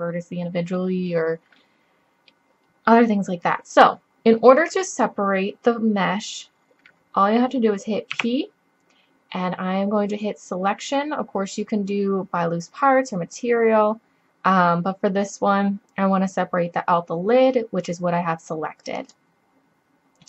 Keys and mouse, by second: 0.8-3.6 middle drag, 8.2 p.